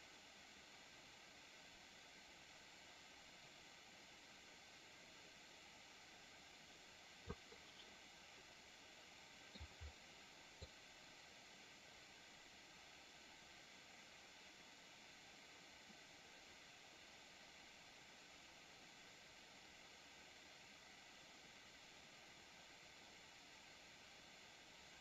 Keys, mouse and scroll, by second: 7.8-9.4 middle drag, 10.5-25.0 drag.